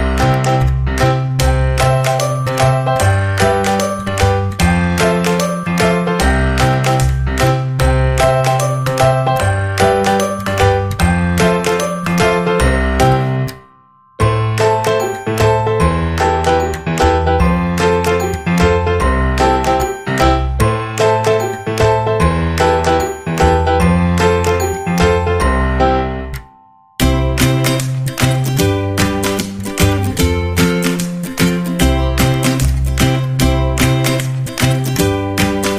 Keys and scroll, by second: 7.4-9.6 typing.